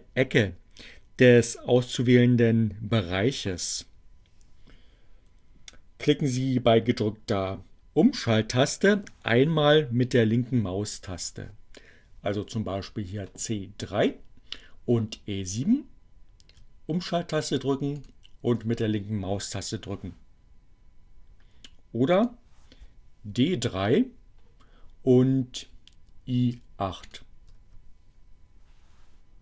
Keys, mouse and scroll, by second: 17.6 shift+click, 20.8 click, 25.7 shift+click.